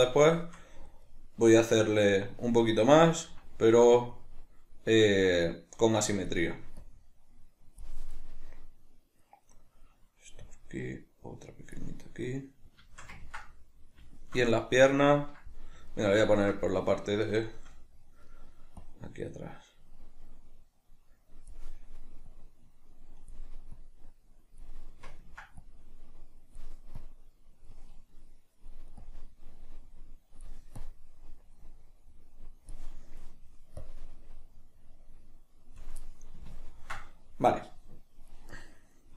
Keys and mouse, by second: 4.1-8.2 drag, 8.2-10.5 middle drag, 10.5-12.1 drag, 12.1-18.8 middle drag, 18.8-21.8 drag, 21.8-22.2 middle drag, 22.2-24.9 drag, 24.9-25.6 middle drag, 25.6-28.1 drag, 28.1-29.0 middle drag, 29.0-32.9 drag, 32.9-33.8 middle drag, 33.8-36.0 drag, 36.0-39.1 middle drag.